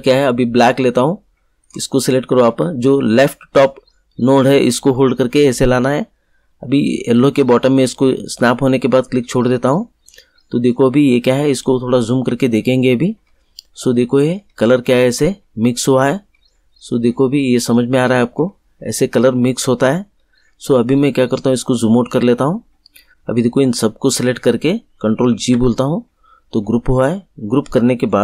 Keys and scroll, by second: 25.2 ctrl+g.